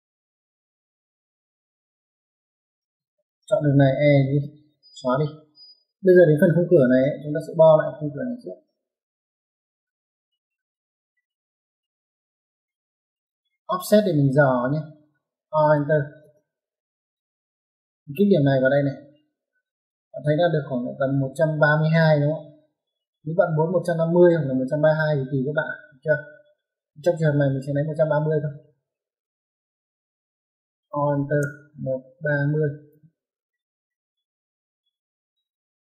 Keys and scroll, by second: 2.7 space, 3.9 typing, 5.2 Escape, 15.7 o, 16.1 space, 28.9 Escape, 30.9-33.4 typing, 35.4 Escape.